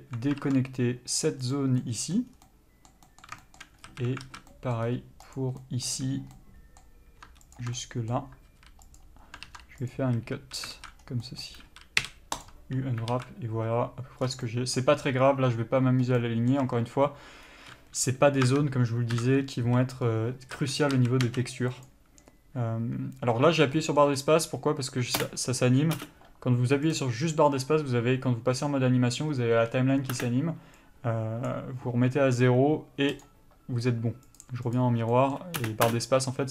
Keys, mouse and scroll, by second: 2.0 middle click, 2.5 scroll down 1, 3.6 shift+middle click, 4.7 middle click, 5.1-5.5 scroll up 1, 5.5 click, 5.8 middle click, 6.6 middle click, 8.0 middle click, 11.2 scroll down 1, 13.3 alt+a, 14.5 scroll down 1, 16.4 middle click, 21.2 a, 21.6 s, 25.4 space, 33.5 click, 35.4 middle click, 35.8 space.